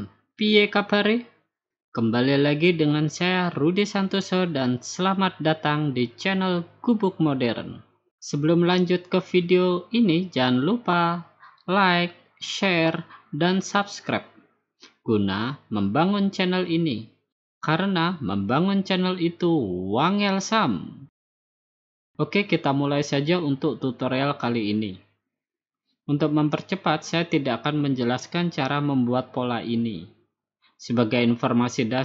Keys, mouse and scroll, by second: 21.5 click, 22.4 click, 24.0 click, 26.3 click, 27.5 click, 30.5 click.